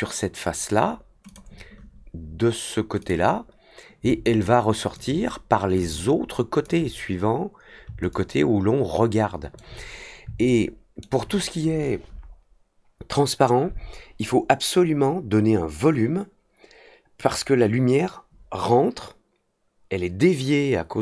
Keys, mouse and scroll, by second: 1.2 click, 2.9 click, 4.0-4.9 alt+drag, 5.7-6.6 alt+drag, 8.0-9.5 alt+drag, 10.4-11.0 alt+middle drag.